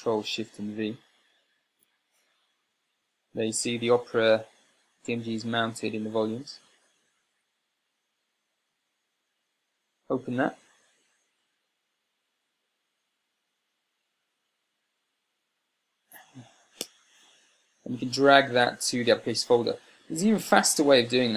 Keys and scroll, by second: 9.6 Return.